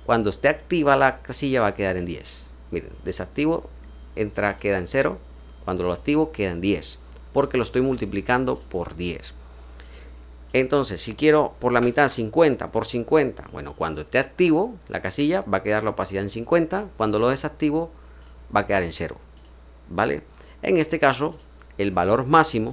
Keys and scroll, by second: 11.6 BackSpace, 11.9 5, 16.9 typing.